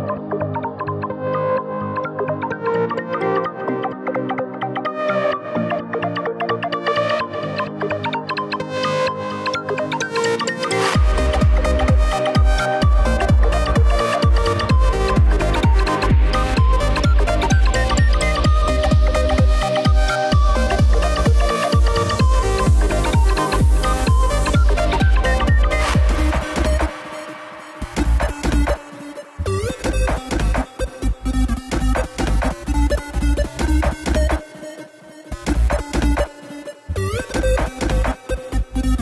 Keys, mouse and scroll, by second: 0.4 z, 0.9-1.3 drag, 1.3 b, 2.3 e, 5.9 Tab, 6.3 z, 6.7 click, 7.0 scroll down 3, 7.1-7.8 middle drag, 7.8-9.3 scroll down 1, 13.0 KP_1, 15.5 click, 17.7 click, 24.8 KP_0, 25.8 KP_0, 26.8 z, 31.0 click, 32.1 click, 34.2 z, 34.9 click, 36.0 z, 36.8-37.6 scroll up 1.